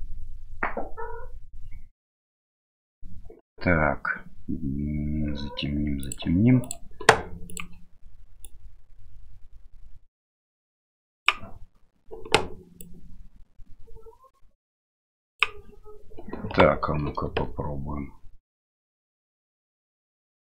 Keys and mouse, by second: 6.0 click, 7.5 click, 12.9-15.4 drag, 17.2 space.